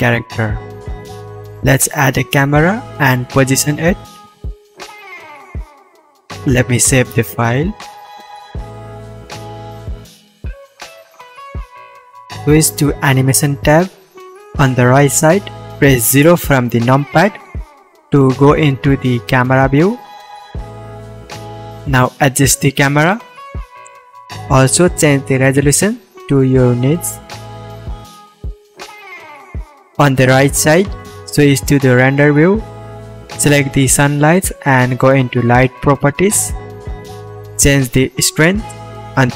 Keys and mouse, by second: 1.9-6.9 middle drag, 4.4 KP_0, 12.8-18.5 drag, 12.8 middle click, 12.8 right click, 14.0 KP_0, 16.9 middle click, 16.9 right click, 17.7 shift+space, 18.5 shift+space, 18.7-21.2 drag, 18.7 shift+space, 19.4-21.2 middle drag, 19.4-21.2 right drag, 24.0 click, 32.2-32.7 drag, 32.7-33.0 middle drag, 33.1-35.0 middle drag.